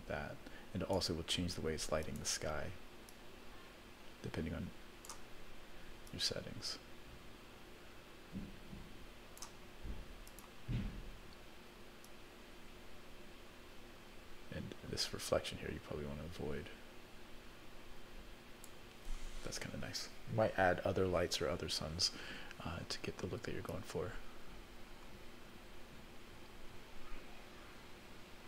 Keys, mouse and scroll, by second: 2.0 click, 3.0-5.1 drag, 6.0-9.5 drag, 10.2 click, 12.0-18.7 drag, 23.7-28.4 drag.